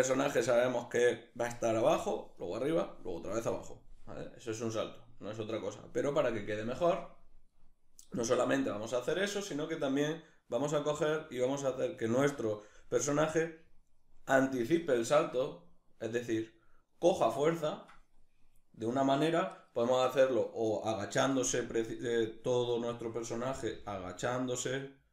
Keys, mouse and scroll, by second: 11.6-15.7 right drag, 22.3-23.3 right drag, 23.3 g.